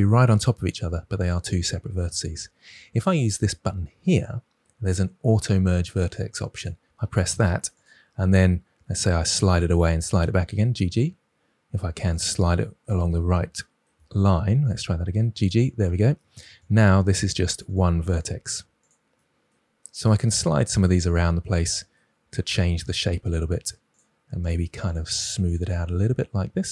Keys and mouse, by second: 6.5 click, 8.7-10.1 typing, 9.4 click, 12.0-12.4 drag, 14.5 g, 14.7 g, 16.5-17.7 drag, 17.6 g, 18.2 g, 18.8-19.1 drag, 20.1 g, 20.7 g, 20.8-21.8 drag, 22.8 click, 23.3 g, 25.0 g.